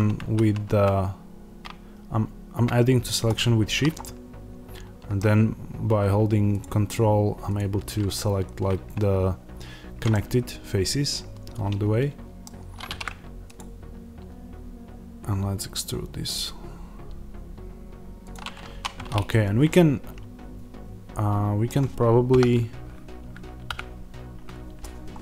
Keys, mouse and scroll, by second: 0.1 ctrl+z, 3.3 shift+click, 3.9-6.5 middle drag, 6.5 ctrl+click, 10.0-16.8 middle drag, 12.4-13.5 scroll down 1, 13.5 alt+e, 18.2 click, 18.6 1, 19.2 click, 19.6-25.0 middle drag, 22.2 KP_1, 25.0 right click, 25.0-25.2 scroll up 1.